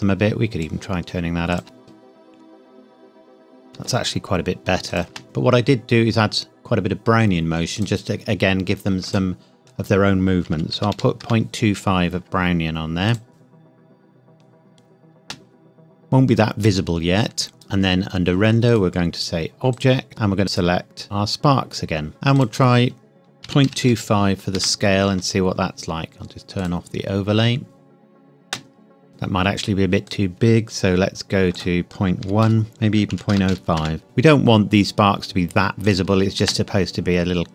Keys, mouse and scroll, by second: 1.6 space, 3.7 space, 4.9 click, 5.0 space, 7.7 click, 10.5 KP_Decimal, 10.7 KP_2, 10.9 KP_5, 11.2 KP_Enter, 13.1 click, 13.3 space, 15.2 space, 15.8-18.6 scroll down 1, 18.6 click, 22.4 click, 23.5 KP_Decimal, 23.7 KP_2, 23.9 KP_5, 24.6 KP_Enter, 26.6 click, 27.6 space, 28.4 space, 29.1-30.1 scroll up 1, 30.1 click, 32.3-33.5 typing, 32.7 click, 33.8 KP_Enter, 34.7-35.9 scroll down 1, 35.9 click, 36.4 space.